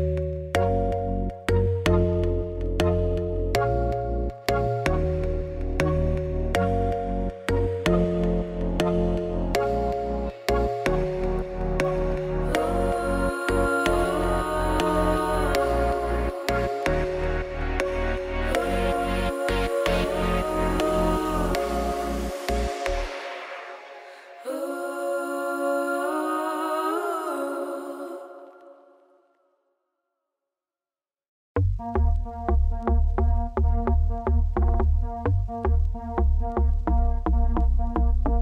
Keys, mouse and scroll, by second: 1.4-1.8 scroll down 1, 1.8 2, 1.9 shift+click, 2.2 shift+middle click, 2.5 scroll up 1, 4.8 scroll up 1, 5.1-6.3 scroll down 2, 6.3 scroll down 1, 6.4 click, 6.7 middle click, 7.7 s, 9.4 shift+click, 11.5-11.9 scroll down 2, 11.9 Tab, 12.1-13.3 middle drag, 13.3-15.9 drag, 15.9 middle click, 16.5 scroll down 2, 16.7 shift+middle click, 17.7 scroll up 1, 17.9 click, 18.2 Tab, 22.4 Tab, 22.6-24.3 shift+drag, 24.4 Tab, 24.6 b, 24.6 click, 26.5 Tab, 26.5 click, 26.7 Tab, 26.8 middle click, 27.0 a, 28.9 Tab, 29.1-29.5 scroll down 4, 29.5-30.7 middle drag, 32.7 scroll up 2, 32.9 click, 33.1 shift+middle click, 33.4 Tab.